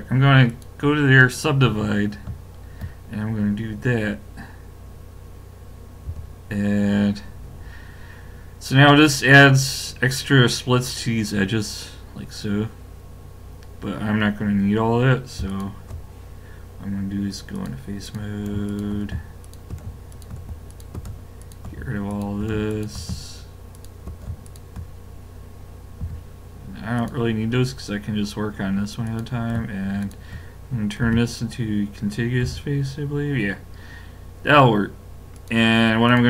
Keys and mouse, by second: 6.1 a, 15.5 click, 17.6-26.4 drag, 26.0 x, 29.1-31.9 drag, 31.0 f, 32.4 a, 35.4 click.